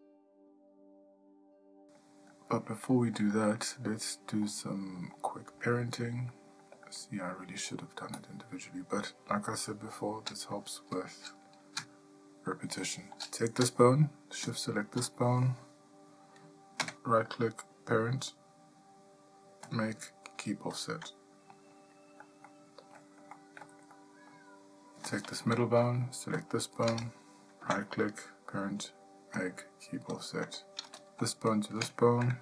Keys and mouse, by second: 0.0 ctrl+middle click, 0.9 middle click, 1.7 shift+middle click, 3.8 shift+middle click, 4.9 middle click, 5.6 ctrl+middle click, 6.8 shift+middle click, 7.5 ctrl+middle click, 17.3 typing, 23.0 ctrl+middle click, 23.8 ctrl+middle click, 24.4 shift+middle click, 26.8 shift+click, 28.1 typing.